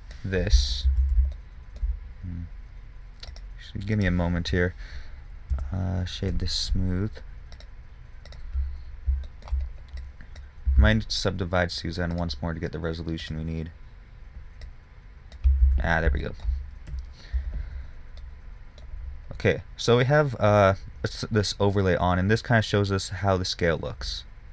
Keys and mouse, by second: 1.3 ctrl+z, 11.1 ctrl+z, 16.1 ctrl+z, 18.1 KP_1, 20.6-22.8 middle drag.